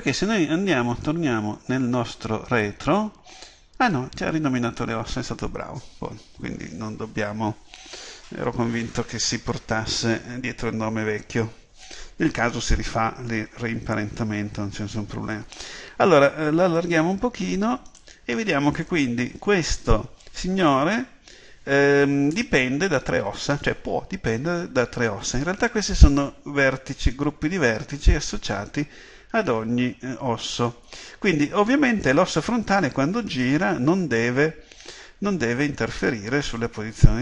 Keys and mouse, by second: 16.8-37.2 drag.